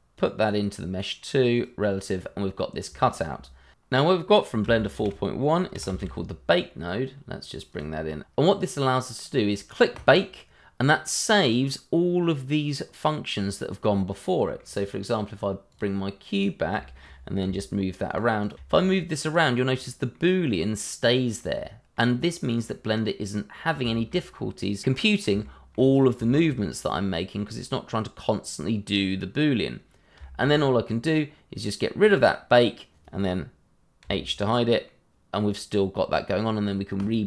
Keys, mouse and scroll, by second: 0.1 middle click, 2.2-2.8 scroll up 1, 3.0 shift+middle click, 3.0 middle click, 3.1 shift+middle click, 3.8 click, 5.1 shift+a, 5.5 b, 5.7 a, 5.7 k, 6.9 click, 9.9 click, 14.2 middle click, 15.7 click, 16.8 shift+middle click, 16.8 middle click, 16.9 shift+middle click, 17.3 g, 17.8 click, 18.2 double click, 18.7 click, 20.1 g, 20.6 click, 21.3 middle click, 21.9-22.2 scroll up 1, 22.2 middle click, 23.0 scroll up 1, 23.2 middle click, 23.9 scroll down 1, 24.1 shift+middle click, 24.5 middle click, 26.3 shift+middle click, 26.9 middle click, 27.0 shift+middle click, 27.3 middle click, 30.2 shift+middle click, 30.2 middle click, 30.3 shift+middle click, 30.5-32.0 scroll up 1, 32.0 click, 34.0 h, 34.8 middle click, 37.0 click.